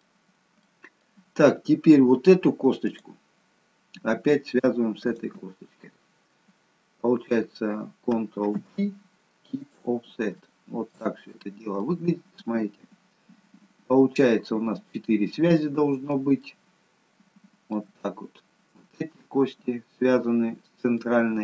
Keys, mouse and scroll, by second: 0.3 scroll down 2, 0.8 middle click, 1.5-2.1 scroll up 2, 2.9 click, 5.1 shift+click, 8.6 ctrl+p, 10.4 shift+middle click, 11.1 scroll up 2, 12.0 middle click, 16.6 shift+middle click, 21.0 middle click.